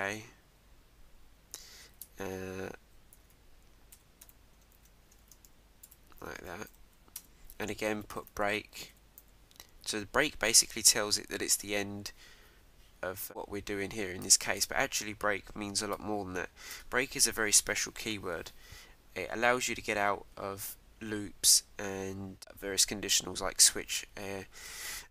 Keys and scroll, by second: 4.4 Right, 4.7 shift+', 5.2 shift+-, 6.4 shift+0, 7.2 Return, 11.6 Return.